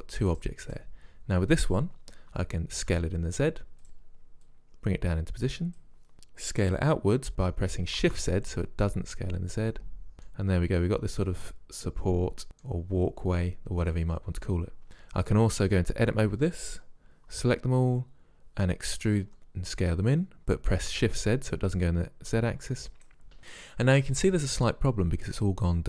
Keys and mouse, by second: 2.4 s, 4.5-6.1 drag, 6.6 s, 10.3-11.2 middle drag, 12.3-13.2 middle drag, 15.6 Tab, 17.4 a, 18.8 e, 19.4 s, 23.4 click, 23.8 click, 24.0-25.2 middle drag.